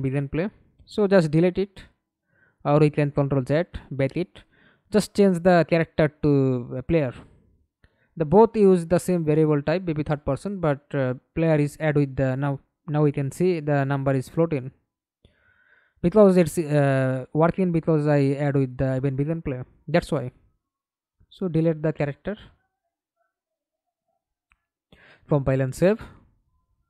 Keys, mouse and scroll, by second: 1.9 ctrl+z, 2.4 ctrl+right click, 2.7-3.3 scroll up 3, 4.2 double click, 7.2 double click, 8.4 middle click, 9.2 F11, 9.7 alt+p, 14.0 Escape, 14.4 middle click, 15.4 F11, 17.4 right click, 19.5 Delete, 20.4 right click, 21.0 right click, 21.8-22.1 scroll down 1, 22.1 right click, 23.4 double click, 24.0 right click, 25.0 right click.